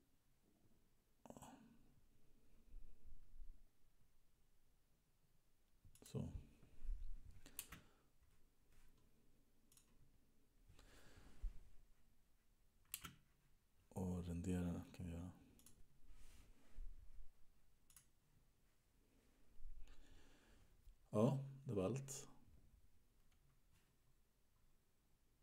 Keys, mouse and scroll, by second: 7.9 space, 9.9 click, 13.2 space, 15.9 click, 18.1 click.